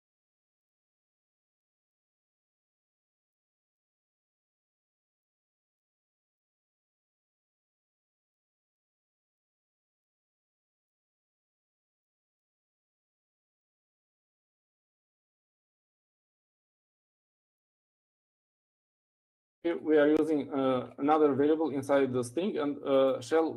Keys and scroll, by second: 0.0-4.4 typing, 6.2 typing, 13.3-19.9 typing.